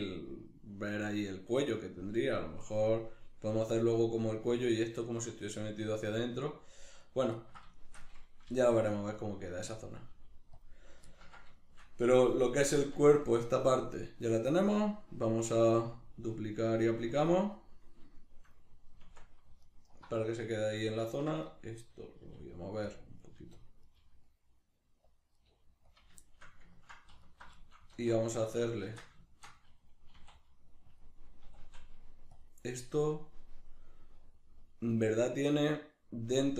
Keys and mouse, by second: 7.0 right click, 7.4-9.0 ctrl+middle drag, 8.5 g, 9.0 click, 9.2 right click, 9.3 g, 9.8 click, 10.0 right click, 10.1 g, 10.6 click, 11.1-14.4 ctrl+middle drag, 12.8 Tab, 14.4-18.2 drag, 18.2-19.6 shift+middle drag, 19.0 Tab, 19.6 alt+right click, 20.4-21.4 middle drag, 21.4 right click, 21.8-22.9 middle drag, 22.2 g, 22.9 click, 23.2 right click, 23.4 g, 23.6 click, 23.8 right click, 24.0 g, 25.2 click, 25.4 right click, 25.5 g, 26.0 click, 26.2-27.2 shift+middle drag, 27.2 alt+right click, 27.6-31.0 shift+middle drag, 27.9 alt+q, 28.8 shift+Tab, 30.2 e, 31.0 click, 31.4 s, 32.4 click.